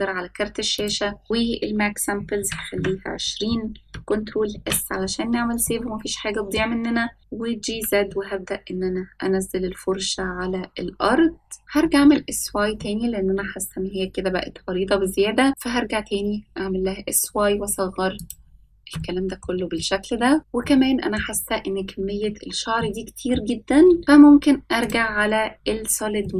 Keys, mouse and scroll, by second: 0.8-2.9 drag, 4.7 ctrl+s, 5.7-6.7 middle drag, 7.7 g, 11.6 shift+click, 11.6-12.7 scroll down 2, 12.7 s, 19.9-20.3 shift+middle drag, 20.4 middle click, 20.4 scroll up 4, 22.1-22.6 shift+middle drag, 24.0 middle click, 26.3 click.